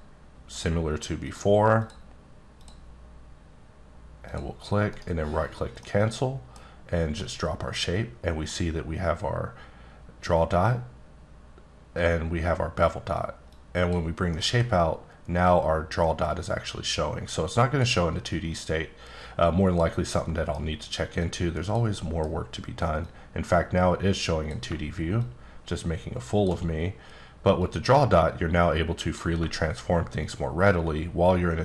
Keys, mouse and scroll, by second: 0.5 ctrl+click, 1.2 ctrl+click, 2.6 ctrl+click, 4.2 ctrl+click, 4.9 right click, 5.8 middle click, 7.2 middle click, 13.5 click, 14.3 middle click, 15.4 click, 18.6 click, 20.2 middle click, 21.2 click, 30.2 shift+click.